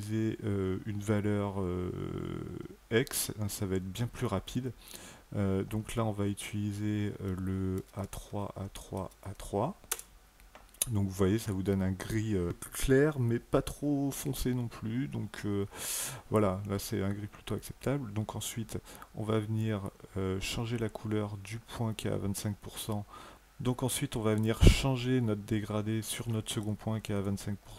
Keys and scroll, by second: 7.6-9.1 typing, 9.7 Return.